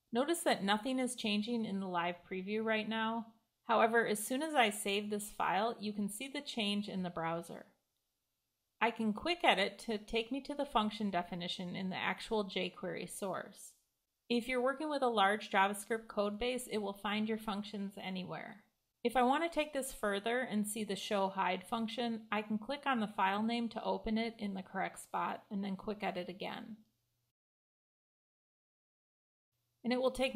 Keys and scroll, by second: 3.8 super+s, 9.3 super+e, 26.9 super+e.